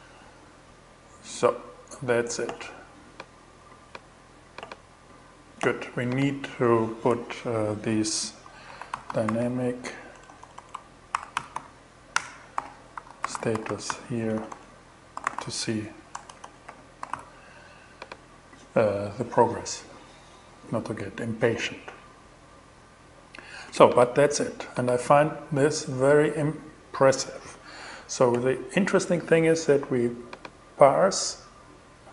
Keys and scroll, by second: 6.5 Return, 7.0 Up, 7.9 shift+Up, 7.9-11.5 typing, 11.6 Return, 12.0 alt+g, 12.4 alt+$, 12.5-17.1 typing.